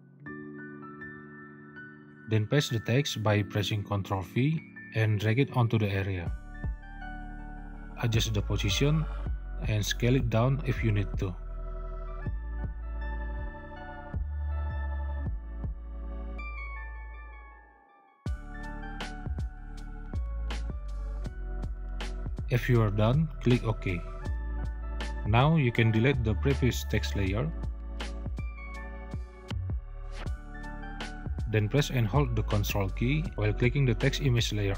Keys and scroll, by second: 3.4 ctrl+v, 4.3 ctrl+v.